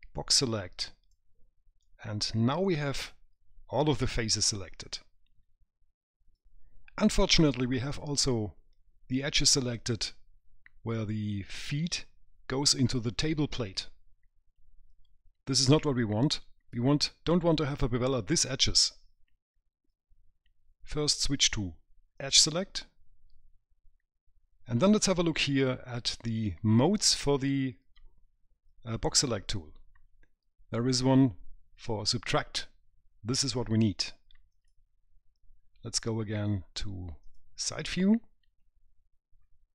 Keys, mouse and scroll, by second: 0.1 click, 2.1 right click, 7.4 right click, 8.4-8.8 scroll up 2, 8.8 middle click, 22.4 click, 34.8 click, 37.5 click, 38.8 middle click.